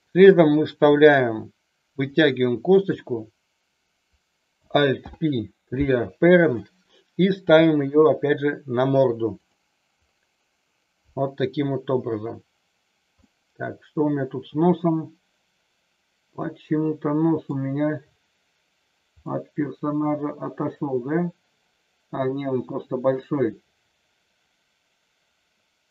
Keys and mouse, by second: 0.8 e, 2.1 click, 4.9 alt+p, 7.5 g, 9.3 click, 13.2-17.6 middle drag, 19.2-25.9 middle drag.